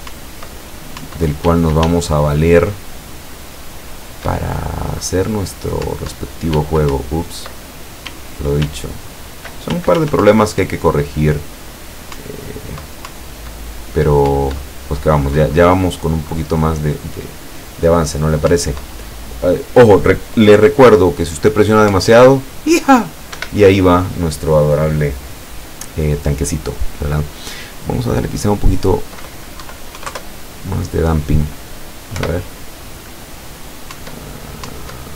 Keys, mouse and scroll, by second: 1.5 w, 1.9 s, 5.9 Up, 6.6 w, 7.0 Up, 8.1 w, 8.7 s, 10.3 Up, 12.2 Up, 14.3 Up, 18.6 Up, 22.1 Up, 23.5 Escape, 28.2 click, 29.7 KP_Decimal, 30.0 KP_2, 30.1 KP_Enter, 32.2 p, 34.0 Up, 34.8 Up.